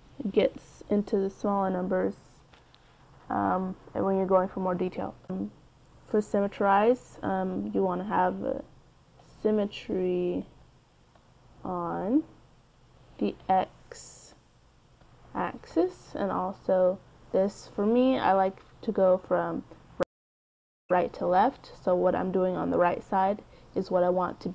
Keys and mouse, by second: 0.8-2.6 drag, 5.9-7.5 drag, 11.3-14.8 drag, 14.9-19.5 drag, 19.5 middle click.